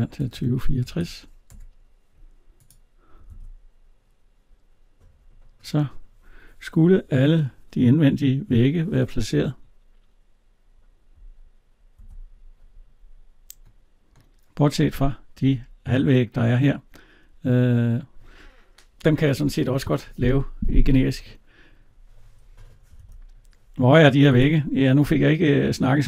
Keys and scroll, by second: 1.4 Return, 3.1 alt+Tab, 11.8 alt+Tab, 22.8 alt+Tab.